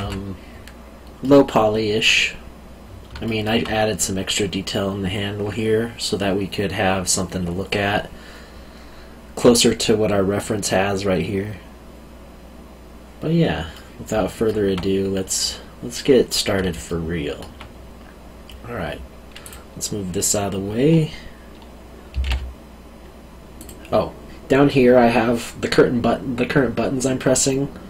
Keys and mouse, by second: 1.2 middle click, 3.2 alt+middle click, 13.7 middle click, 16.8 alt+middle click, 19.4 click, 22.1 g, 22.2 y, 23.5 click.